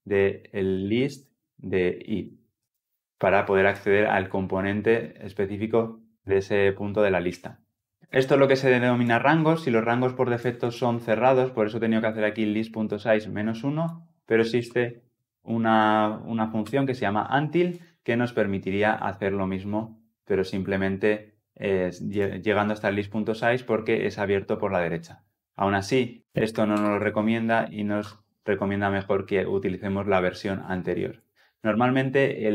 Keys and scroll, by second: 4.4 Escape, 14.5 alt+Return, 26.6 alt+Return.